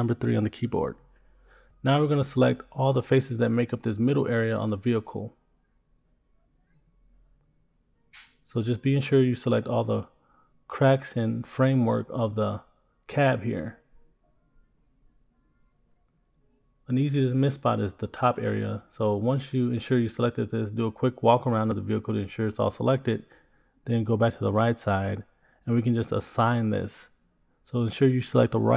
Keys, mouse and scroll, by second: 1.2 shift+click, 1.4 shift+click, 2.3 scroll down 1, 2.9 middle click, 3.4 shift+click, 3.6 middle click, 4.0 shift+click, 4.5 middle click, 4.7 middle click, 5.1 shift+click, 5.2 shift+click, 5.4 shift+click, 5.6 shift+click, 5.8 shift+click, 6.1 shift+click, 6.2 shift+click, 6.5 shift+click, 6.6 shift+click, 6.7 middle click, 7.1 shift+click, 7.3 shift+click, 7.4 shift+click, 7.6 shift+click, 7.7 shift+click, 7.8 shift+click, 7.9 shift+click, 8.1 shift+click, 8.2 middle click, 8.4 shift+click, 8.6 middle click, 8.9 scroll up 3, 9.1 shift+middle click, 9.2 middle click, 9.9 shift+click, 10.1 scroll down 3, 10.2 middle click, 10.5 scroll up 3, 10.6 shift+middle click, 10.8 middle click, 11.1 shift+click, 11.2 shift+click, 11.6 shift+click, 11.9 shift+click, 12.0 middle click, 12.2 shift+middle click, 12.3 middle click, 12.5 scroll up 1, 12.7 shift+click, 12.9 shift+middle click, 13.1 scroll up 3, 13.2 shift+middle click, 13.5 shift+click, 13.5 shift+click, 13.7 scroll down 3, 13.8 middle click, 14.1-14.5 scroll up 3, 14.2 shift+middle click, 14.5 shift+middle click, 14.9 shift+click, 15.1 scroll down 2, 15.6 shift+click, 15.7 shift+click, 15.8 middle click, 16.2 shift+click, 16.5 shift+middle click, 16.7 middle click, 17.0 scroll down 2, 17.2 shift+middle click, 17.3 middle click, 17.5 shift+click, 17.7 shift+click, 17.8 shift+click, 17.9 scroll down 2, 18.1 middle click, 18.3 shift+middle click, 18.9-23.2 middle drag, 27.6 click.